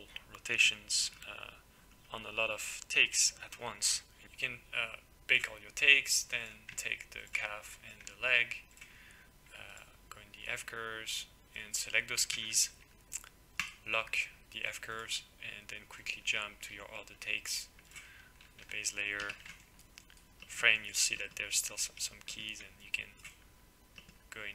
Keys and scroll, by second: 12.3 ctrl+c, 19.2 f.